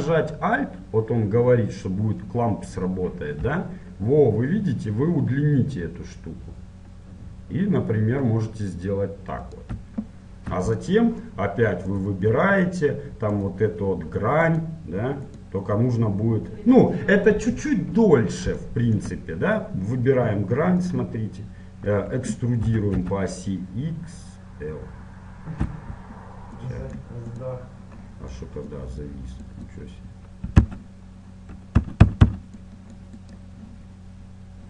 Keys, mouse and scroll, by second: 10.9-12.0 middle drag, 12.0 click, 12.0-17.2 right drag, 18.2-20.8 middle drag, 21.0-22.6 drag.